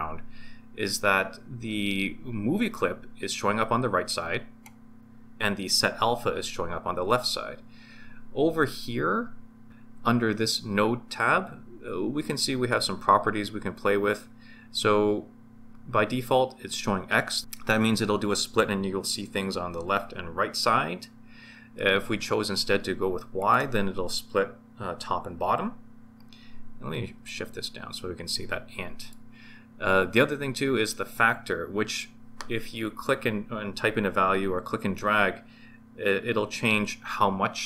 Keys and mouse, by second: 23.4 click, 27.3-29.1 drag, 34.9-37.6 drag.